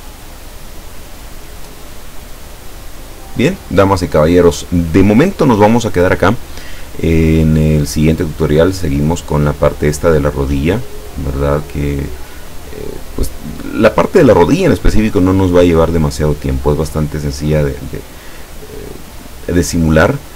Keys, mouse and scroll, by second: 1.8-2.4 ctrl+scroll down 4.